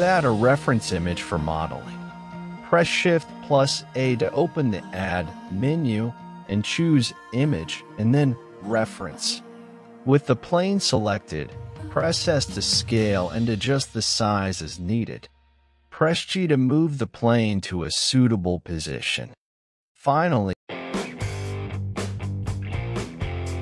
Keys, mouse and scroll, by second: 0.5 right click, 1.1 x, 2.3-3.3 scroll up 5, 3.3-4.0 scroll down 5, 4.0 right click, 5.6 s, 9.2 g, 13.1 click, 15.2 click, 16.6-18.9 drag, 19.5 shift+middle click, 20.4-22.6 scroll up 1.